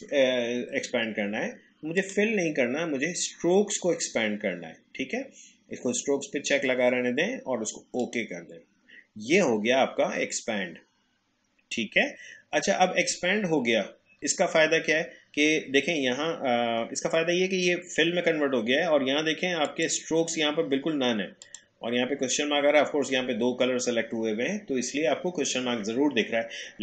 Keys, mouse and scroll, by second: 2.0 click, 8.0 click, 19.7 click.